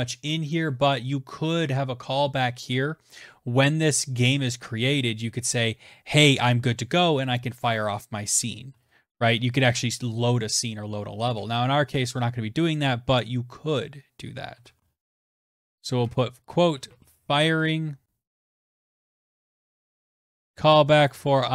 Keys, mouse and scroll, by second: 0.0 click, 7.5-8.4 typing, 10.2-10.9 typing, 11.2 Tab, 13.4-17.0 typing, 18.1-21.5 typing.